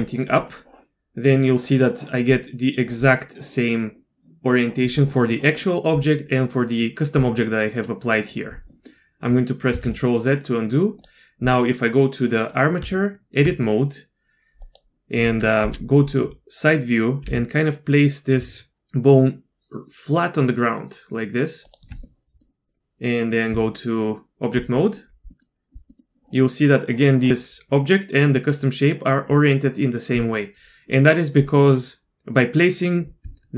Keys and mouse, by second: 3.1 middle click, 8.7 middle click, 9.7 ctrl+z, 10.2 click, 11.0 click, 11.5-12.5 drag, 12.8 Tab, 13.7 click, 15.6 KP_3, 17.2 g, 22.1-22.4 drag, 23.5 Tab, 24.8 middle click, 25.3 middle click, 25.9 middle click, 30.2 middle click, 31.5 middle click, 33.2 Tab.